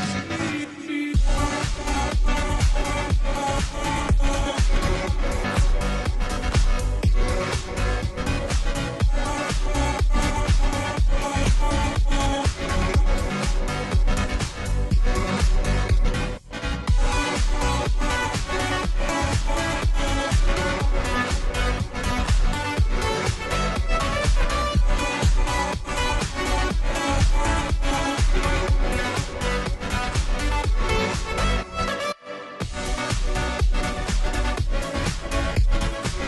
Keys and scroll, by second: 0.2-36.2 typing, 1.3 ctrl+t, 15.0 ctrl+z, 35.5 Down.